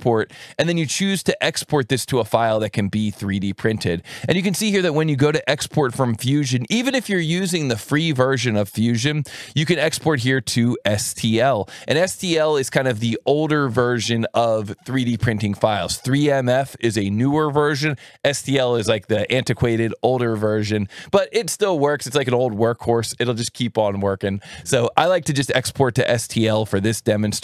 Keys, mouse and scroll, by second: 1.0 click, 5.0-8.8 drag, 26.7 click.